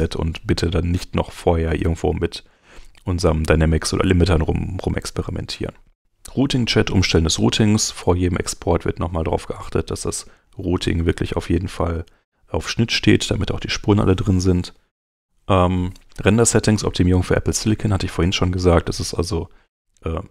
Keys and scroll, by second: 9.8 super+Tab, 13.2 super+Tab.